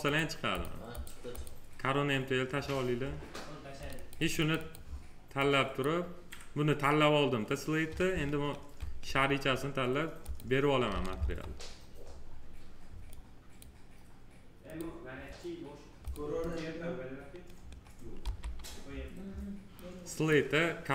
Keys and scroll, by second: 11.1 F4, 18.1 m.